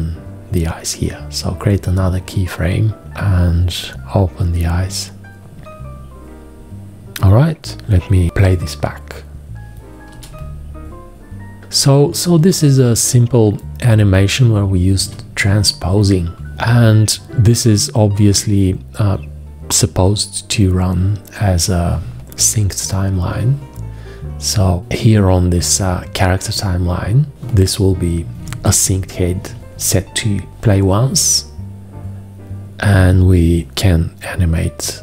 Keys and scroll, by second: 10.0 Return, 12.2 Return, 14.9 Return, 28.4 v.